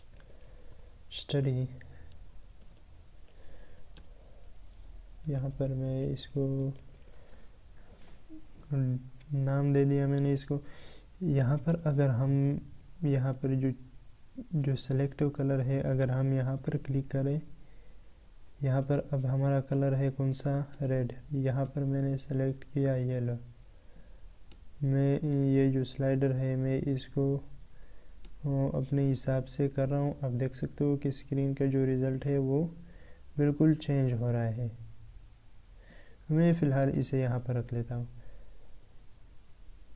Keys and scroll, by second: 3.8 ctrl+BackSpace, 5.3 ctrl+Delete.